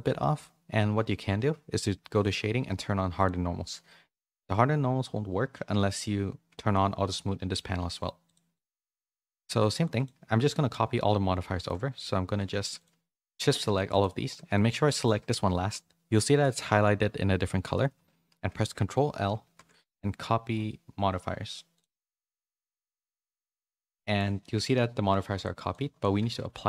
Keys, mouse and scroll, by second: 2.1 click, 3.1 click, 5.8 click, 8.2 click, 8.6 click, 8.9 middle click, 9.4 shift+middle click, 9.9 click, 11.6 shift+middle click, 12.8-14.3 shift+drag, 14.5 shift+middle click, 14.8 middle click, 19.4 ctrl+l, 22.8 middle click, 23.0 middle click, 23.5 shift+middle click, 24.0 middle click, 24.4 shift+middle click, 24.8 middle click, 25.3 click, 25.8 click, 26.3 ctrl+a.